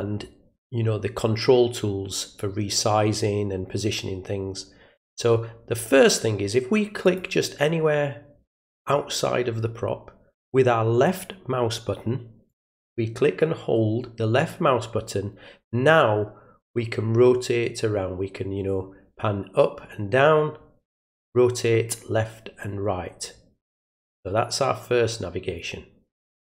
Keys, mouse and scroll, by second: 7.0 click, 12.5-26.4 drag.